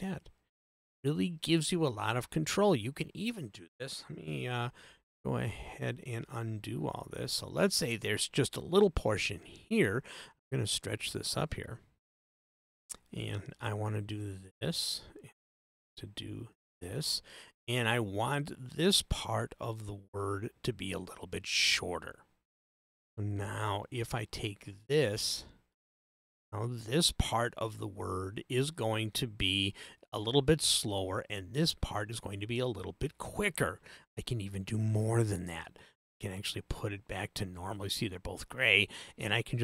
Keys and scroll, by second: 4.4 super+z.